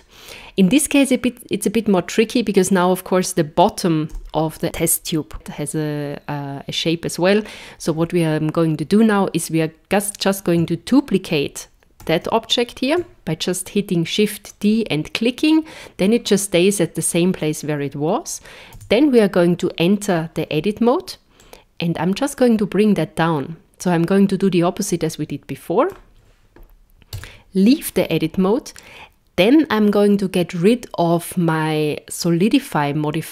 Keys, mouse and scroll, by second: 4.1 KP_0, 10.0 click, 12.3 shift+d, 18.8 Tab, 21.4 click, 27.1 Tab.